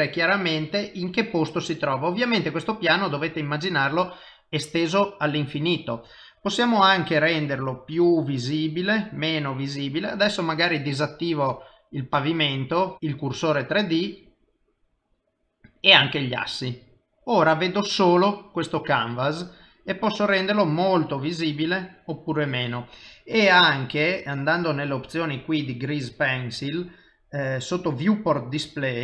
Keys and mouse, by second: 0.3 click, 0.8 middle click, 5.9 click, 16.7 middle click, 19.2 click, 24.9 click, 25.7 middle click, 26.4 click, 27.8 click, 28.3 middle click.